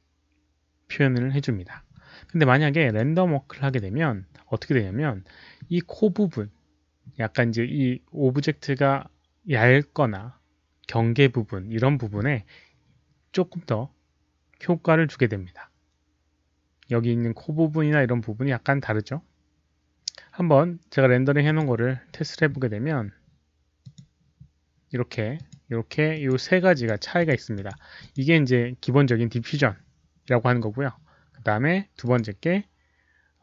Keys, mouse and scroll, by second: 2.9 click, 3.6 click, 10.6 click, 13.6 click, 21.4 click, 23.7 click, 25.3 click, 26.1 click, 26.7 click, 27.1 click, 27.5 click, 27.9 click, 31.0 click, 32.0 click.